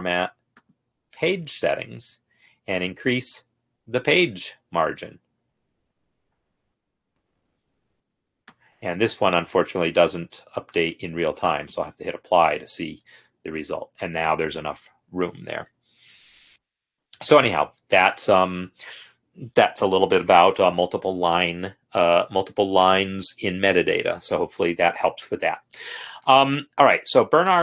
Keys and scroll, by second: 4.9-9.1 Up.